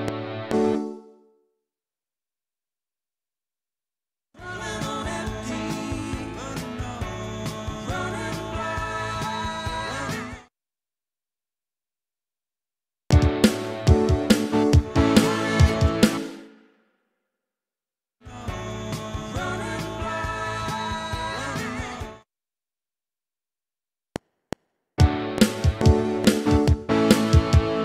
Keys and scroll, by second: 0.7 space, 4.4 space, 10.2 space, 12.9 space, 14.8 space, 17.6 ctrl+shift+Left, 18.2 space, 21.9 space, 22.9 Delete, 24.0 F7.